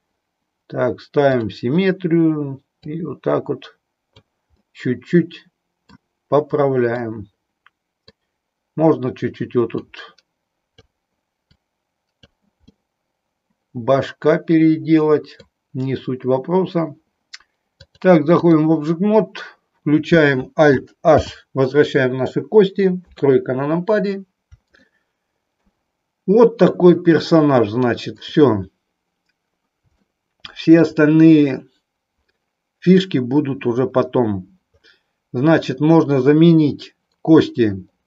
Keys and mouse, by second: 1.3 click, 2.8-4.3 drag, 4.7-5.9 middle drag, 6.9-8.2 middle drag, 9.7-10.8 drag, 11.4 click, 12.7-15.4 middle drag, 17.7 click, 21.1 alt+h, 22.9 KP_3, 24.8 middle click, 28.9 click, 30.1 shift+middle click.